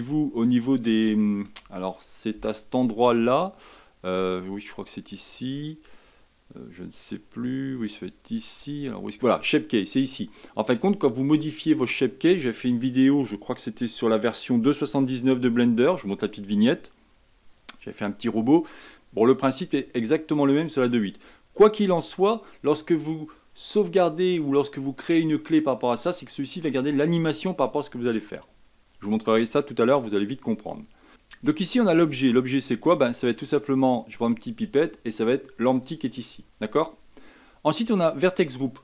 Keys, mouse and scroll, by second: 30.9 click, 33.7 click.